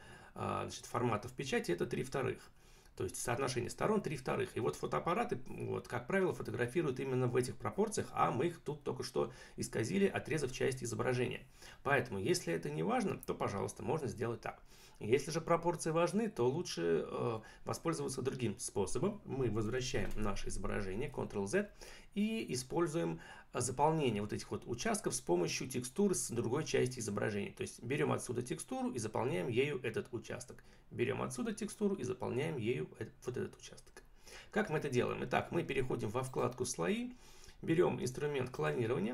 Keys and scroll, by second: 19.9 ctrl+z.